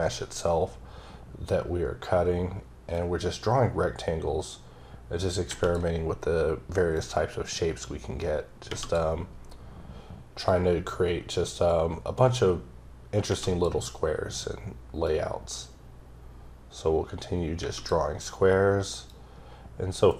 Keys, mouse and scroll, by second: 6.9 click, 10.5 click, 15.0 click, 19.1 click.